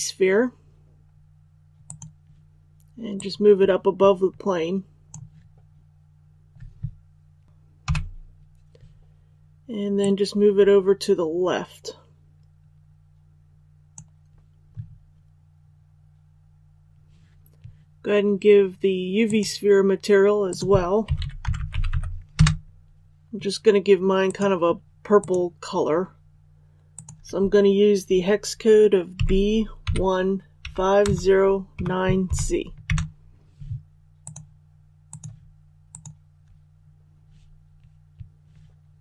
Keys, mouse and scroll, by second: 1.8-6.0 drag, 7.8 KP_7, 9.9-14.4 drag, 21.0-21.8 typing, 24.2 click, 29.1-32.2 typing, 34.1 click.